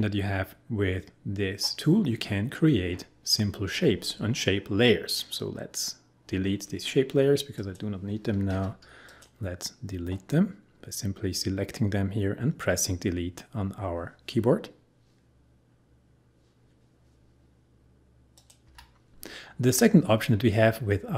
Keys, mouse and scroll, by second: 7.6 click, 8.5 Delete, 18.4 click, 18.7 Delete.